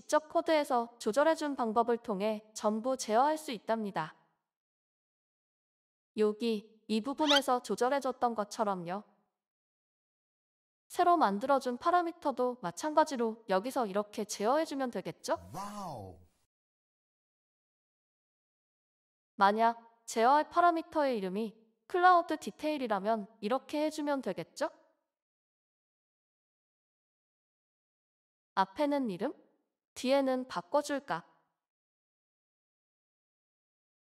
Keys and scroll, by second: 5.2 ctrl+f, 5.2 typing, 6.2 Escape, 11.0 Return, 11.4-15.8 typing, 18.1-18.9 typing, 20.0 typing, 32.4-34.0 typing.